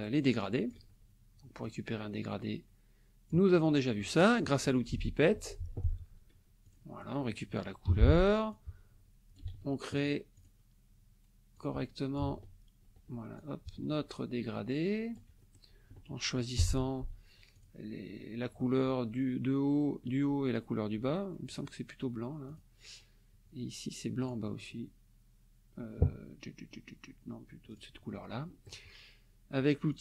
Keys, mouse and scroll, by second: 1.6-3.5 drag, 4.9 F8, 5.3 F7, 6.7 click, 7.0 click, 7.8 g, 8.5 ctrl+click, 9.4 ctrl+z, 10.4 click, 11.5 ctrl+click, 12.2 ctrl+z, 13.4-15.3 ctrl+drag, 15.4 ctrl+click, 16.6 F7, 17.5 click, 21.5 click, 22.5 click, 24.2 click, 27.7 click, 29.9 click.